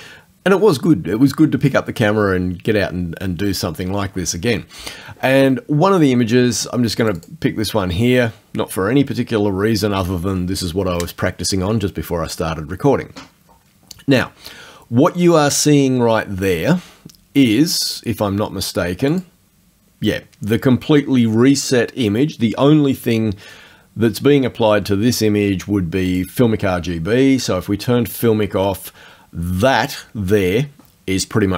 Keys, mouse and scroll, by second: 7.0 click, 17.9 click, 19.1 click, 26.1 click, 28.1 click.